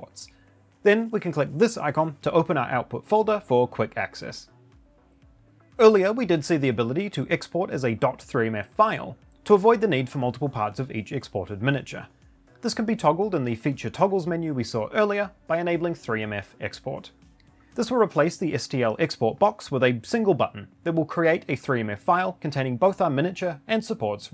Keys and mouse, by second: 1.1 click.